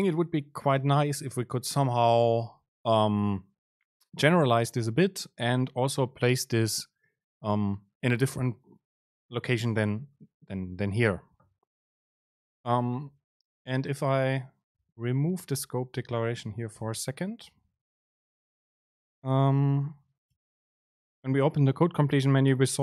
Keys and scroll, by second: 13.9 Down, 14.4 Up, 15.7 Down, 16.6 BackSpace, 17.6 shift+Down, 18.2 Down, 20.4 BackSpace, 21.0 super+space.